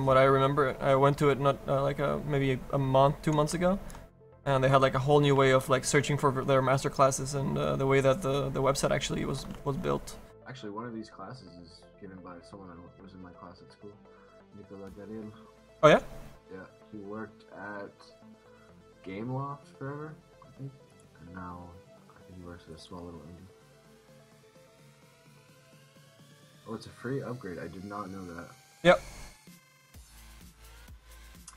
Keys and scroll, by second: 26.5 ctrl+z.